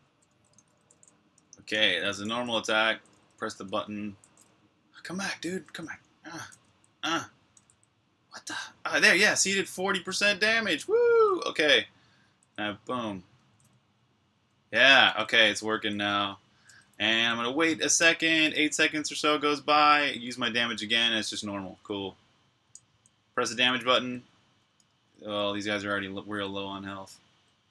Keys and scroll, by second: 0.0-4.7 typing, 8.6-17.0 typing, 18.2-19.6 typing, 20.6-27.7 typing.